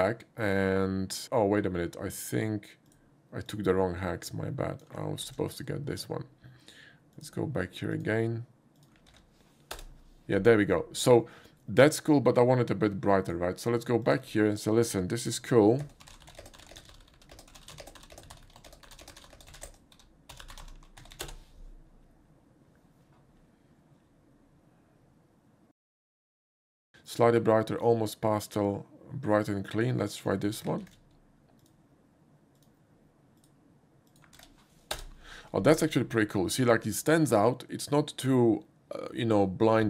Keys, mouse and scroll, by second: 2.9 click, 3.5-4.8 drag, 5.2 ctrl+c, 6.0 click, 7.1 click, 7.9 click, 8.8 click, 9.2 ctrl+v, 9.7 Return, 13.2 click, 14.0 click, 15.2 ctrl+v, 15.8-21.1 typing, 21.2 Return, 26.0 click, 29.7 click, 30.9 ctrl+c, 32.6 click, 33.4 click, 34.1 click, 34.4 ctrl+v, 34.9 Return.